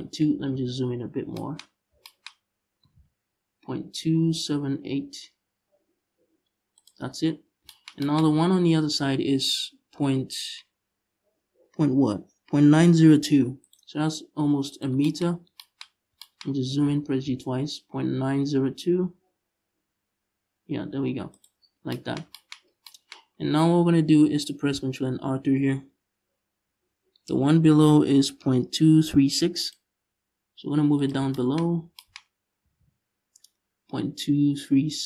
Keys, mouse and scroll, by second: 0.2 KP_Decimal, 1.3-1.7 scroll up 1, 2.0-2.4 scroll up 1, 2.5 g, 6.5 shift+click, 6.7 scroll down 1, 7.9 scroll up 1, 12.9 ctrl+r, 14.5 shift+click, 15.0-15.3 scroll up 1, 15.5-15.8 shift+scroll up 1, 16.3 g, 21.1 shift+click, 21.3-21.6 scroll down 1, 22.3 scroll down 2, 22.8-23.4 scroll up 2, 23.4-24.1 scroll up 1, 24.1-26.3 scroll up 1, 26.3 ctrl+r, 30.7 click, 31.3-31.6 scroll up 2, 31.9-32.3 scroll up 1, 32.3 g.